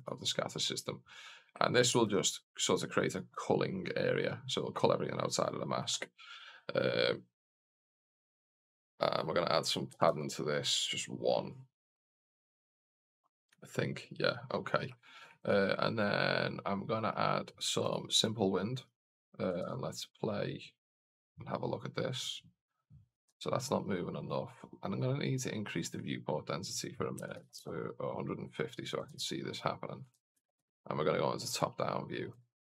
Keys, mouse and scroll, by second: 1.9 shift+f, 8.2-14.5 drag, 15.2-17.9 drag, 19.5 alt+a, 23.2 alt+a, 24.1 click, 25.1-28.1 drag, 29.0 alt+a, 30.2 alt+a, 30.2 KP_0, 30.5 KP_7, 31.7-32.2 scroll up 1, 32.2 scroll up 1, 32.3 alt+a.